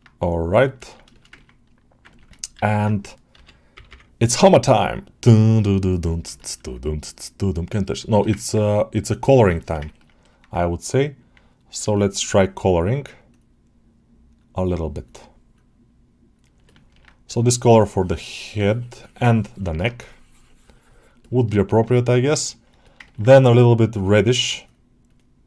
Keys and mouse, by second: 0.1 click, 0.5 middle click, 0.7 ctrl+alt+middle click, 1.0 alt+shift+middle click, 1.2 ctrl+alt+middle click, 2.0 ctrl+alt+middle click, 4.8-6.1 drag, 6.2 shift+middle click, 7.4 click, 8.0 alt+shift+middle click, 8.2 ctrl+alt+middle click, 8.9 click, 9.5 shift+middle click, 9.7 ctrl+middle click, 10.1 alt+middle click, 16.6 ctrl+alt+middle click, 17.2-19.4 drag, 19.6 middle click, 19.8 click, 21.1 click, 21.4 alt+middle click, 21.8 ctrl+alt+middle click, 22.3 alt+shift+middle click, 22.7 alt+middle click, 22.9 ctrl+alt+middle click.